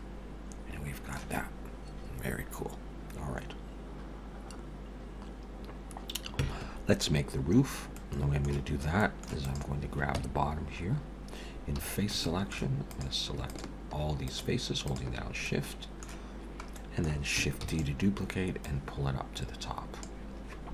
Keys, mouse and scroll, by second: 7.9 middle click, 8.6-9.0 scroll down 4, 9.0 middle click, 9.4 click, 10.2 Tab, 10.8-11.2 scroll up 2, 11.8 3, 12.2 shift+middle click, 12.9 click, 13.5 shift+click, 14.3 click, 15.0 click, 15.4 middle click, 16.3 scroll down 1, 16.8 middle click, 17.6 shift+d, 18.6 click.